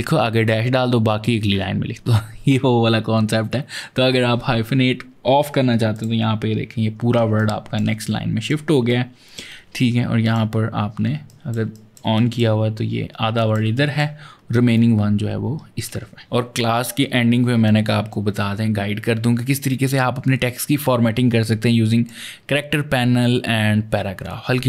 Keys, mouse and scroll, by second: 5.7 click, 7.2 ctrl+click, 7.6 ctrl+space, 7.8 click, 8.1 space, 8.7 ctrl+click, 11.0-12.8 typing, 11.1 click, 11.5 click, 12.0 click, 13.2 ctrl+click, 14.6 ctrl+click, 21.3 click.